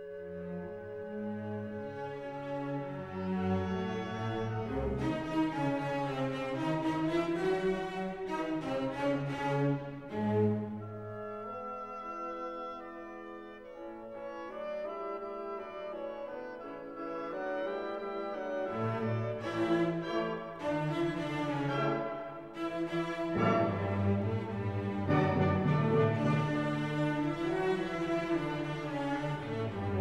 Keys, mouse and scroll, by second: 0.6 scroll down 1, 1.3 middle click, 2.8-3.3 scroll down 1, 12.3-14.7 drag, 14.7-30.0 middle drag.